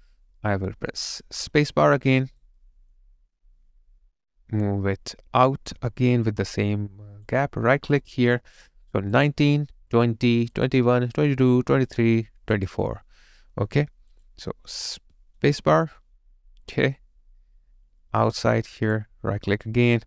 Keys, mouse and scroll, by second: 1.6 space, 2.2 alt+right click, 2.6 alt+middle click, 11.7 double click, 15.4 space, 19.5 right click.